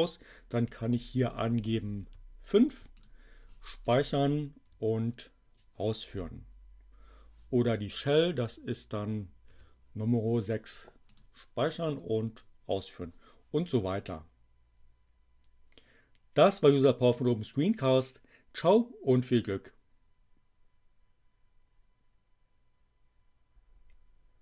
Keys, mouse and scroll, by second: 0.0 click, 2.0 5, 2.9 click, 3.9 click, 4.6 Up, 5.0 Return, 8.4 click, 9.4 6, 10.3 click, 11.0 click, 11.9 Up, 12.3 Return.